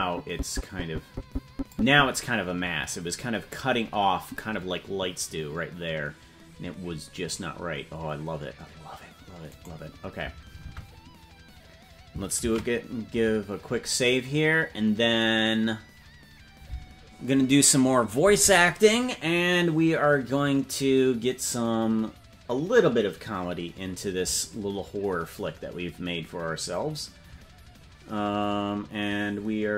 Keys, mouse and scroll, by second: 9.9 right click, 10.9 ctrl+Tab, 15.3 ctrl+s.